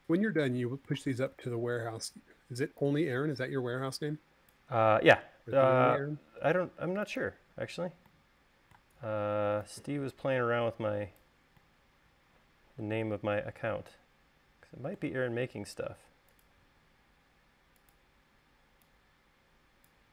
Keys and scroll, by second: 2.1 super+z.